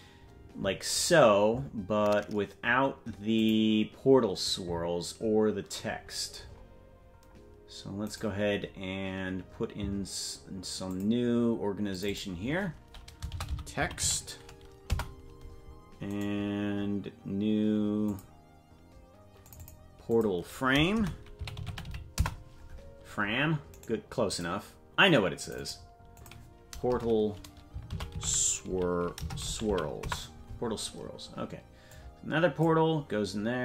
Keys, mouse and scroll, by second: 3.3 click, 7.0-8.0 scroll down 8, 8.0-11.9 right drag, 8.0 scroll up 1, 11.9-17.3 drag, 17.3-19.4 right drag, 19.4-24.8 drag, 24.8 right click, 25.4 click, 25.8-30.7 drag, 32.1-33.6 drag.